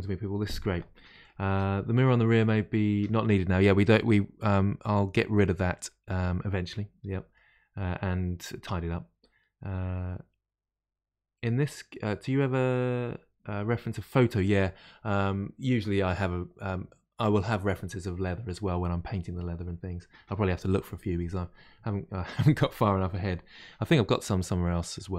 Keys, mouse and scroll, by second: 3.5-6.7 middle drag.